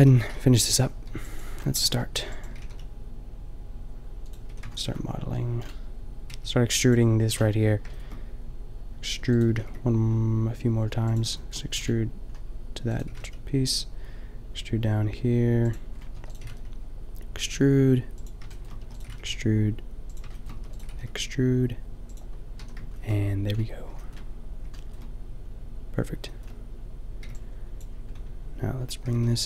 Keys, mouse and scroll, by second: 0.0 a, 0.3 a, 1.0 b, 2.1 b, 2.5 g, 4.5 a, 6.3 b, 9.2 e, 9.5 g, 12.9 e, 13.1 g, 16.2 e, 16.6 g, 18.3 click, 18.8 e, 19.1 g, 20.5 e, 20.8 g, 22.7 a, 27.2 b, 29.0 g.